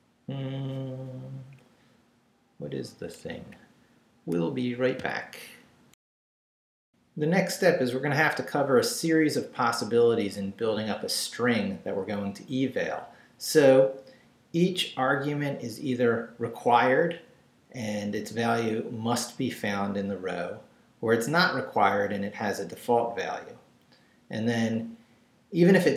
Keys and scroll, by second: 1.4 Down, 3.2 Down, 5.9 alt+shift+super+z.